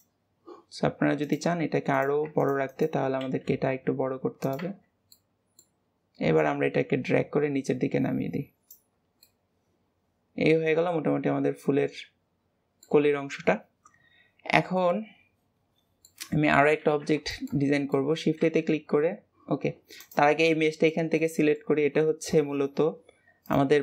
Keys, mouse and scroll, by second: 1.2 click, 1.9 click, 2.3 alt+shift+click, 2.6 alt+shift+click, 3.2 s, 4.8 scroll down 2, 5.1-6.3 middle drag, 6.3 click, 8.8-9.2 scroll down 2, 9.2-12.2 middle drag, 14.5 scroll down 2, 14.8-16.3 middle drag, 16.3-16.8 scroll up 1, 16.8 ctrl+s, 17.2-17.8 scroll up 3, 17.3 shift+middle drag, 17.8-18.4 middle drag, 18.4 shift+a, 19.9 click, 20.4-23.8 middle drag.